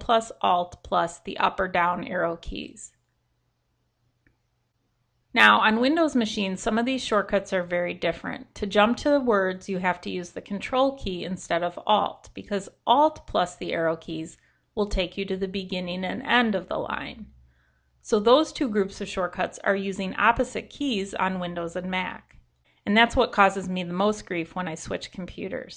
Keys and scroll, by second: 0.5 ctrl+alt+Up, 0.8 ctrl+alt+Down, 1.2 ctrl+alt+Down, 2.5 ctrl+alt+Down.